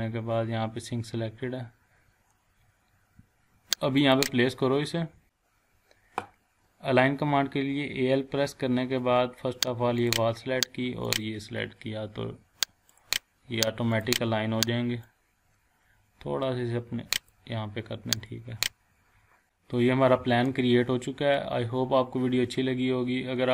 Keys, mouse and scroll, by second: 2.8 scroll up 1, 4.0 click, 5.0-5.7 typing, 10.0-15.6 drag, 18.5 scroll down 1, 19.4-20.5 shift+middle drag.